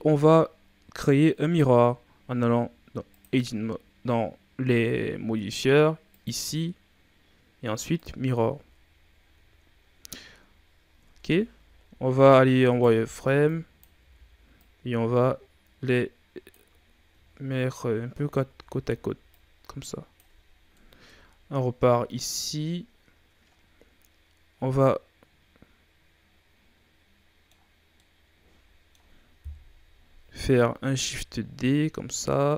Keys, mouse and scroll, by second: 3.0 click, 8.0-8.5 drag, 8.5 a, 8.8-9.7 scroll down 5, 9.7-10.1 scroll up 4, 10.1-10.5 shift+scroll down 4, 10.6-11.0 scroll up 1, 11.0 Tab, 12.0 z, 12.7 right click, 12.9 b, 13.9 z, 14.5 click, 16.7-17.3 scroll down 1, 17.3-18.0 shift+scroll up 7, 18.0 a, 18.4 a, 19.2-21.0 drag, 21.0 KP_3, 22.0-23.6 scroll down 1, 23.6 scroll up 1, 24.8-27.8 middle drag, 27.9-29.3 middle drag, 29.3 KP_3, 30.8 shift+d.